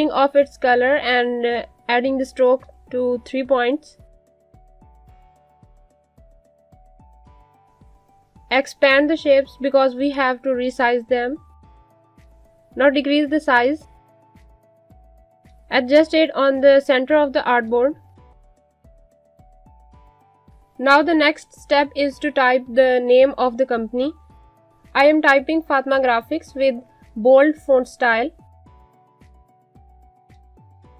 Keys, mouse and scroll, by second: 2.8 click, 14.2 g, 15.0 alt+shift+click, 16.1 scroll up 1, 16.3 shift+click, 17.4 click, 21.0 click, 22.8-26.4 typing, 26.8 click, 30.6 click.